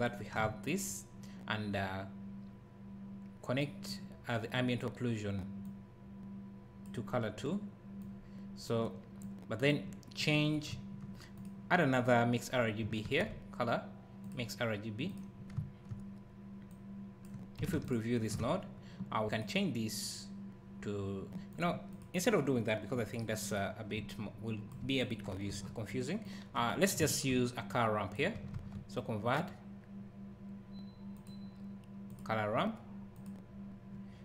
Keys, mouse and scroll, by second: 0.0 ctrl+shift+click, 3.6 click, 9.3 click, 10.4 scroll up 1, 10.7 `, 11.4 click, 13.0 shift+a, 15.1 click, 15.5 `, 16.7 click, 17.8 ctrl+shift+click, 19.4 click, 24.1 alt+click, 24.2 alt+click, 25.1 click, 25.5 Delete, 26.3 click, 27.7 click, 27.7 click, 27.8 click, 28.6 shift+a, 33.3 click.